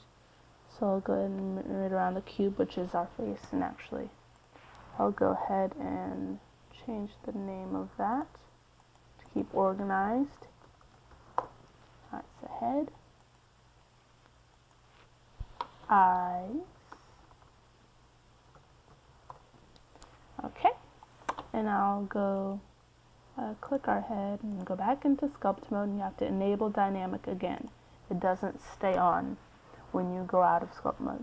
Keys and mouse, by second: 5.4-7.3 right drag, 10.3-14.6 drag, 18.0-19.7 right drag, 19.7-22.6 drag, 22.2 e, 23.4 BackSpace, 23.6 BackSpace, 23.9 BackSpace, 30.8-31.2 right drag.